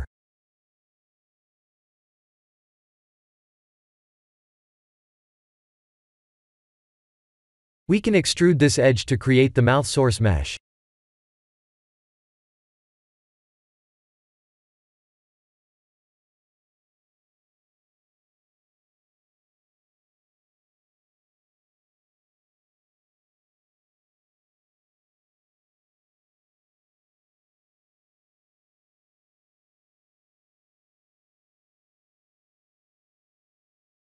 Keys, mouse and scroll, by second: 0.1 3, 0.5 click, 1.0 x, 2.5 ctrl+z, 2.9 s, 3.7 x, 5.8 2, 6.1 click, 8.6 e, 9.8-14.8 typing, 16.9 Tab, 18.4 ctrl+3, 22.1 click, 22.8 click, 27.7 click, 28.1 click, 29.3 Tab, 31.8 click, 32.5 g.